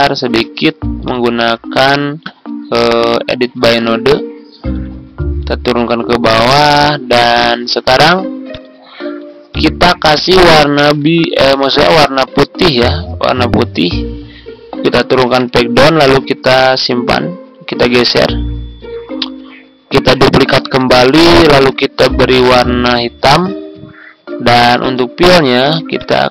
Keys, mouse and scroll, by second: 0.1 ctrl+z, 0.9-5.2 drag, 5.8 Down, 6.3 Down, 6.4 Down, 8.5 click, 10.2 click, 10.7 ctrl+d, 13.3 click, 15.3 ctrl+Page_Down, 15.9 ctrl+Right, 16.6 ctrl+Right, 17.7 Left, 20.5 ctrl+d, 22.4 click, 24.9-26.3 drag.